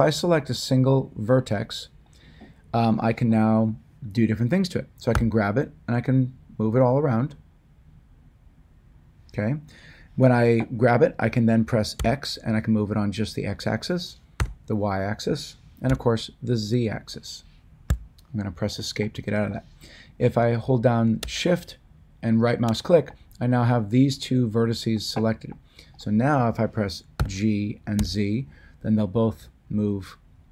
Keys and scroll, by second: 5.1 g, 11.9 x, 14.3 y, 15.9 z, 17.9 ctrl+z, 27.1 g, 27.9 z.